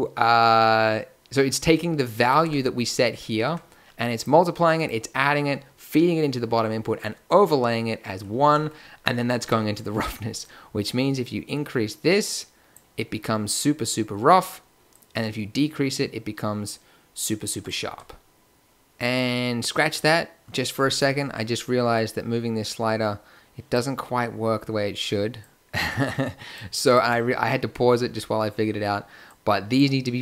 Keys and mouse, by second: 2.4 Tab, 3.4 Tab, 9.4 Tab, 18.4 Tab, 23.8-25.3 middle drag, 27.0 Tab.